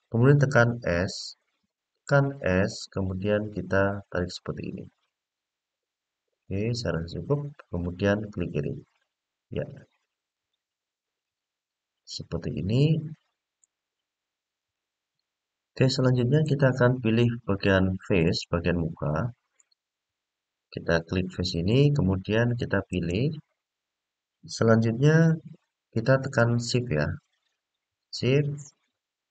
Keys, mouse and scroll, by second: 2.2-6.8 s, 8.4 click, 10.0 click, 11.0-13.5 middle drag, 15.5 middle click, 18.0 click, 22.7 click, 26.1-28.2 middle drag.